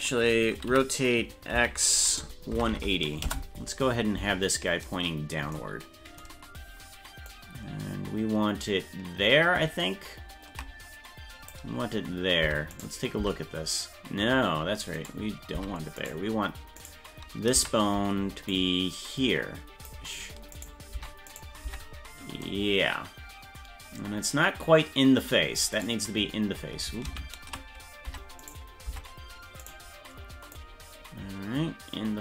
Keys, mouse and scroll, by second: 0.7 r, 7.3 click, 7.7-9.0 drag, 9.0-10.3 drag, 10.3-11.6 ctrl+drag, 12.5 Tab, 12.8 right click, 13.2 Tab, 15.0 right click, 15.6 Tab, 16.0 right click, 16.8 right click, 17.6 Tab, 18.5 click, 19.4 click, 20.5 right click, 21.0 Tab, 21.3 right click, 21.7 Tab, 25.8 right click, 27.1 ctrl+z, 28.1 Tab, 28.5 right click, 28.9 Tab, 29.7 right click, 30.6-32.2 drag.